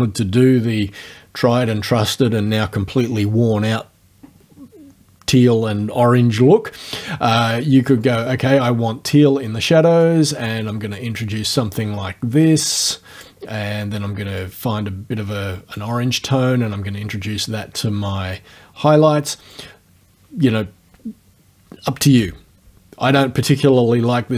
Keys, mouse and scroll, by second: 7.9-9.5 drag, 10.0-13.4 drag, 14.4-16.0 drag, 16.3-19.7 drag.